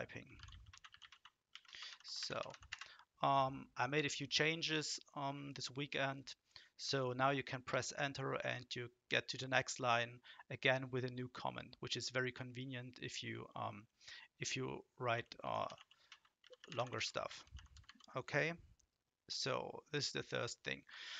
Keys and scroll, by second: 0.0-3.0 typing, 7.7 Return, 14.9-18.3 typing, 20.9 Down.